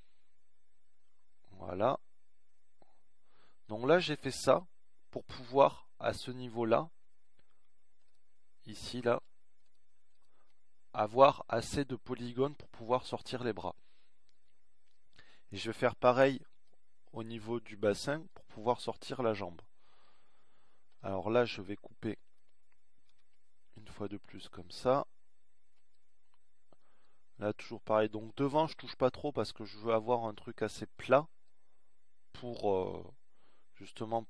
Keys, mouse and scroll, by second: 8.5-12.3 drag, 17.2-23.4 middle drag, 23.7 ctrl+r, 34.1-34.2 middle drag.